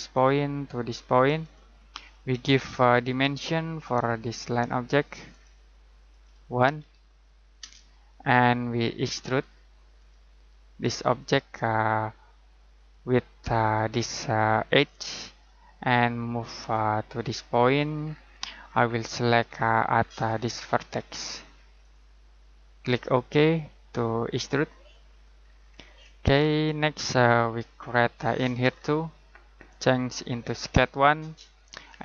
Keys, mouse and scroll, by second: 6.8 1, 7.6 Return, 9.2 click, 12.7 click, 18.0 scroll down 1, 18.2-19.0 scroll up 1, 19.9-21.8 scroll down 1, 21.8 click, 24.3 click, 25.4 scroll down 1, 25.5-26.8 scroll up 1, 26.8 middle click, 28.3-29.0 scroll down 1, 30.4 click.